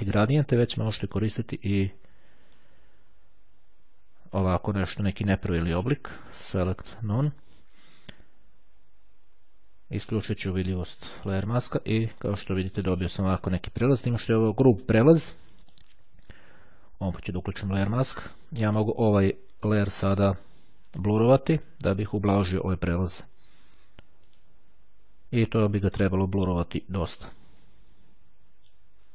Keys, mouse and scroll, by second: 1.5-3.2 drag, 6.4 click, 7.2 click, 9.2-10.7 right drag, 11.1 click, 15.3-16.3 drag, 15.3-16.3 right drag, 17.0-18.6 drag, 20.8 click, 24.3 click, 26.9-29.1 drag.